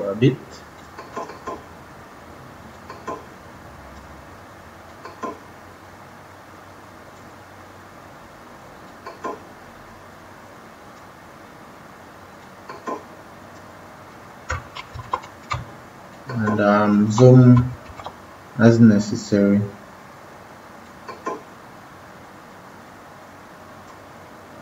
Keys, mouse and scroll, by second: 14.7 ctrl+=, 14.8 ctrl+=, 15.4 space, 16.0 click, 16.1 space, 17.8 ctrl+-, 20.8 click.